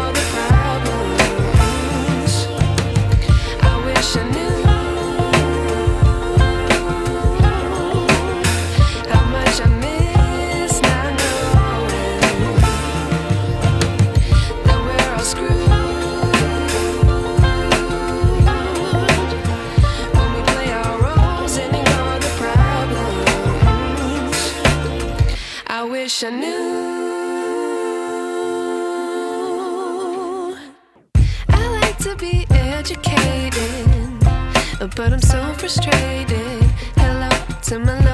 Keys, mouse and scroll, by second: 0.5 ctrl+t, 1.8-2.7 alt+shift+drag, 5.8-7.3 shift+drag, 30.0 click, 32.3 ctrl+t, 33.7-34.3 alt+shift+drag.